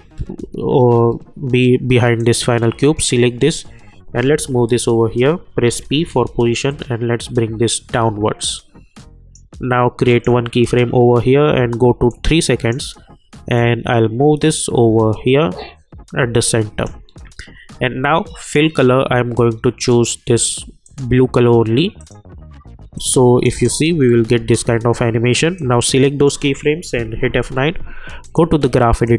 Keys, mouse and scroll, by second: 4.2 [, 6.7-23.4 drag, 23.4 space, 25.5-27.1 drag, 27.1 F9, 28.2 click.